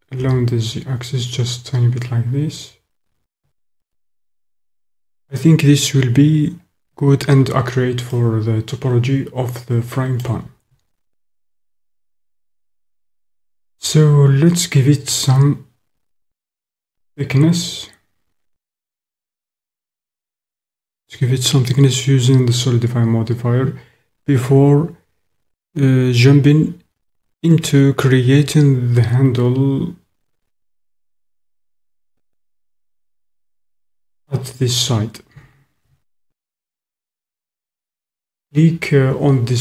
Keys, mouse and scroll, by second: 0.3 z, 3.8 click, 8.1 click, 8.2-10.2 middle drag, 31.8-32.9 middle drag, 36.3 shift+middle click.